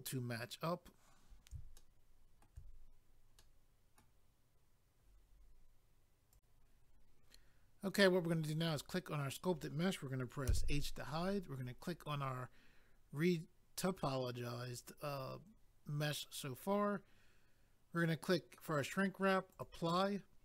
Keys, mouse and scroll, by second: 0.1 scroll up 1, 1.8 shift+middle click, 3.4 middle click, 6.3 click, 8.6 click, 8.7 click, 11.5 click, 11.6 click, 19.5 click, 19.6 click.